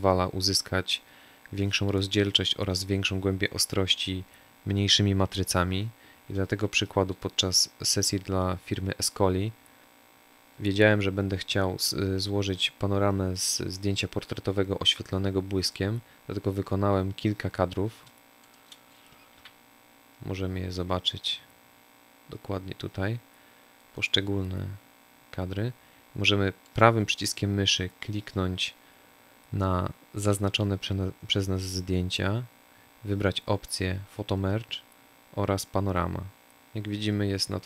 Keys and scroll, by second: 19.1 n.